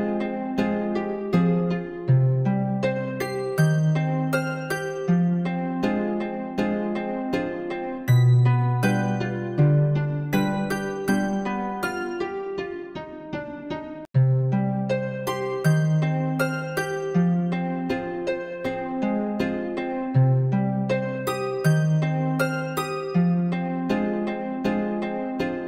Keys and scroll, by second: 1.1 ctrl+b.